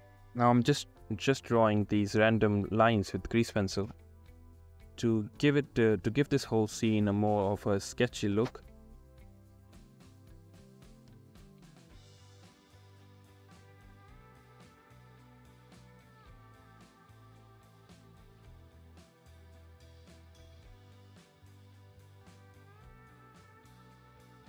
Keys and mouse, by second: 0.2 Return, 0.6 Return, 2.1 Return, 2.1 ctrl+z, 2.7 ctrl+z, 3.2 Return, 3.8 Return, 5.2 Return, 6.1 Return, 7.9 Return, 8.6 Return, 8.8 Return, 9.1 ctrl+z, 10.1 ctrl+z, 11.5 ctrl+z, 11.5 [, 11.6 [, 12.6 ctrl+z, 22.6 ctrl+z.